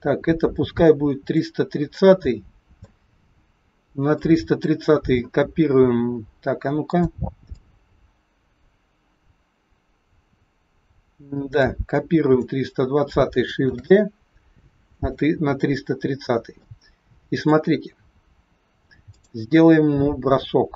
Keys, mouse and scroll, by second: 1.9 middle click, 4.1 click, 6.8 click, 7.5 click, 11.8 click, 13.7 shift+d, 16.6 middle click, 17.8-18.9 scroll up 1, 18.9 click.